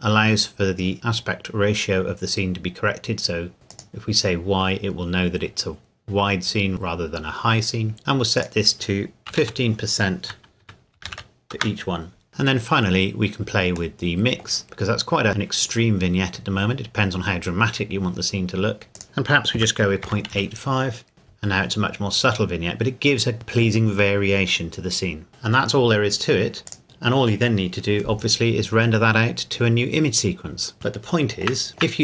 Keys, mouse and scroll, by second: 3.7 click, 8.4 click, 9.3 KP_1, 9.4 KP_5, 10.6 Tab, 11.0 KP_1, 11.1 KP_5, 11.5 KP_Enter, 14.1 middle click, 14.7 scroll up 1, 16.0 scroll down 1, 18.9 click, 19.6 KP_Decimal, 20.1 KP_8, 20.3 KP_5, 21.8-23.3 scroll down 1, 25.3 scroll down 1, 26.7 click, 30.7 scroll up 1, 31.0 shift+middle click, 31.8-32.0 scroll down 3.